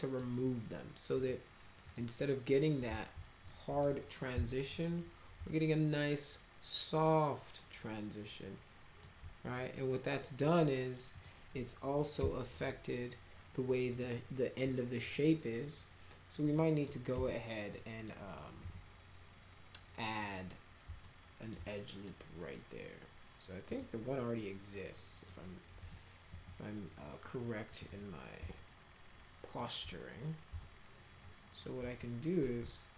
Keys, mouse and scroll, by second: 1.1 click, 1.9 click, 2.5 middle click, 3.0 alt+middle click, 3.4 middle click, 4.3 F4, 4.7 middle click, 5.5-9.0 alt+middle drag, 10.2 middle click, 11.1 click, 12.2 F3, 13.9 click, 14.6 click, 15.0 click, 16.5 middle click, 17.1 F3, 17.8 middle drag, 18.6 F3, 21.0 alt+middle click, 21.7 middle click, 23.6 click, 24.4-25.3 middle drag, 25.8 F4, 26.3 F3, 27.7 click, 27.9 click, 28.6-29.6 alt+middle drag, 30.6-31.6 alt+middle drag.